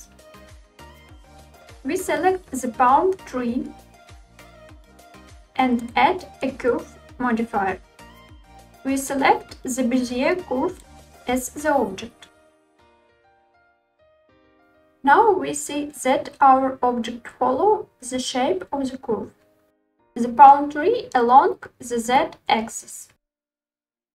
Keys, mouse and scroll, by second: 0.7 click, 4.9 click, 8.4 click, 11.0-13.4 drag, 13.6-14.9 scroll down 3, 14.9-16.1 middle drag, 16.4-17.6 shift+middle drag, 21.9 z.